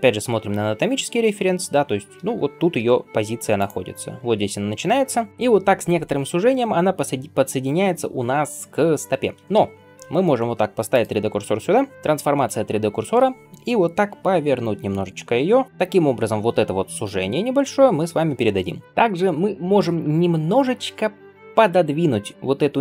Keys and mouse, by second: 2.6 g, 5.3 KP_1, 10.8 shift+right click, 10.9-22.8 shift+middle drag, 14.1 r, 22.0 Tab.